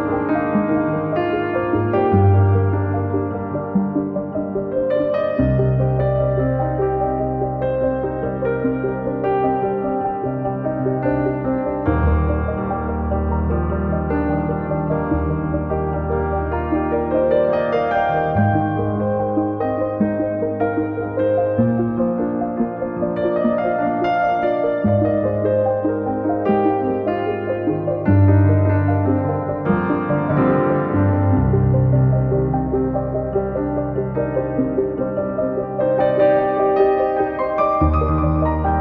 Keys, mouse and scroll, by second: 0.3 super+u, 1.5 shift+middle click, 6.3 click, 6.8 KP_Decimal, 10.4 click, 11.7 shift+click, 12.2 shift+click, 12.6 shift+click, 13.1 shift+click, 13.5 shift+click, 14.7 shift+click, 15.1 shift+click, 15.4 shift+click, 15.5 shift+middle click, 17.3 shift+click, 17.8 shift+click, 18.2 shift+click, 19.9 shift+click, 21.2 shift+click, 21.5 shift+click, 22.1 shift+click, 25.5-26.7 shift+middle drag, 26.7 shift+click, 27.7 shift+click, 28.3 shift+click, 29.1 middle click, 29.9-30.9 scroll up 2, 30.9-31.7 scroll up 1, 31.7-32.4 scroll up 1, 36.7 middle click, 37.4 click, 37.5 middle click.